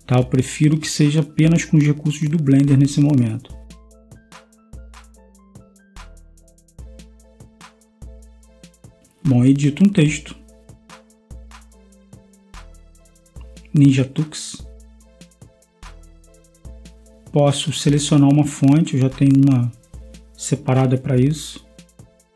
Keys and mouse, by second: 2.7 space, 10.8 Tab, 12.5-13.9 typing, 15.6 space, 15.7 t, 16.1 x, 19.1 Tab.